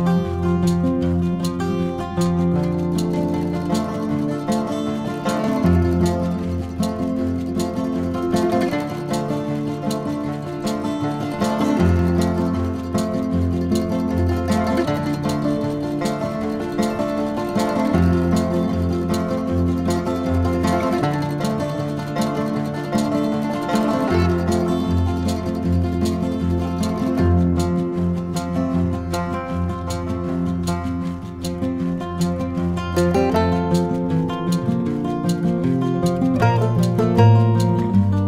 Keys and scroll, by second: 15.0 v, 25.8 v, 35.6 v.